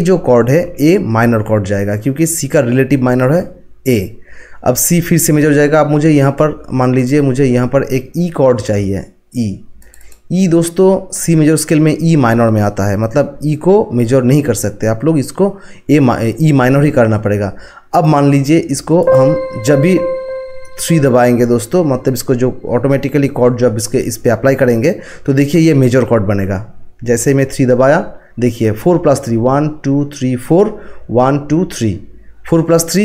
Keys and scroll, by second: 27.8 3.